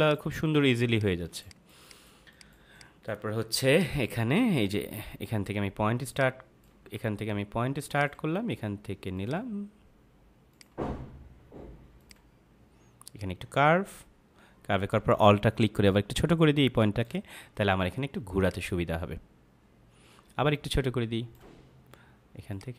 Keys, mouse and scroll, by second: 1.2-3.0 typing, 1.4 click, 1.8 click, 2.2 click, 2.6 click, 3.6 click, 4.0 space, 6.0 click, 7.9 click, 18.4 click, 22.4 click.